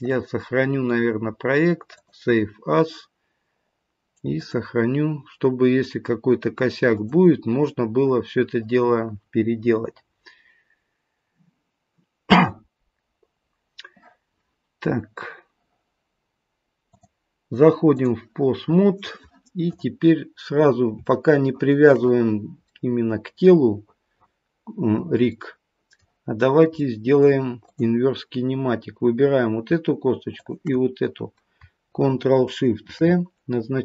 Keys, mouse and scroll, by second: 0.0 click, 13.3-16.3 scroll up 1, 16.9 click, 19.6 click, 20.3-20.9 scroll up 1, 20.9 scroll up 1, 21.1 shift+middle click, 22.7 middle click, 25.3 middle click, 26.4 scroll up 1, 26.7 middle click, 27.6 click, 30.3 shift+click, 32.8 ctrl+shift+c.